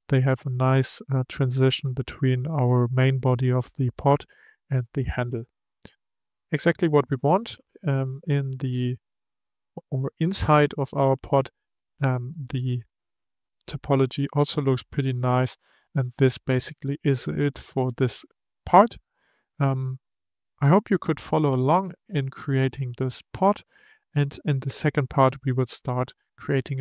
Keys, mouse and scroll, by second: 1.1-4.1 middle drag, 5.4-8.4 middle drag, 8.9-15.9 middle drag, 15.9-16.4 scroll down 4, 16.4-19.4 middle drag, 20.3-26.3 middle drag.